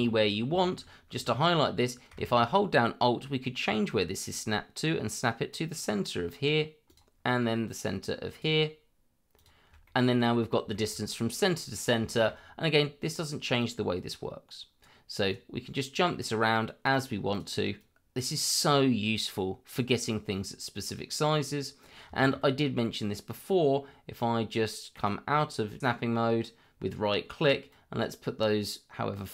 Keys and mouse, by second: 0.0 shift+middle click, 0.5 shift+middle click, 4.2 alt+click, 6.9 alt+click, 8.3 alt+click, 9.3 alt+click, 9.8 middle click, 10.7 shift+middle click, 11.1 middle click, 12.1 shift+middle click, 13.6-14.8 drag, 15.8-16.8 drag, 17.3 click, 17.8-19.3 drag, 22.1 shift+middle click, 24.9-27.7 right drag, 27.7-29.3 drag.